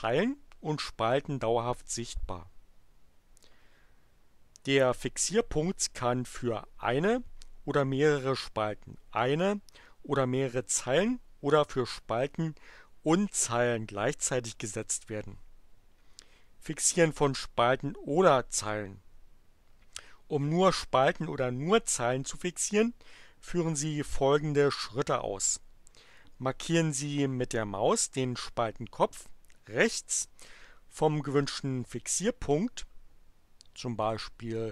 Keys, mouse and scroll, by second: 34.0 click.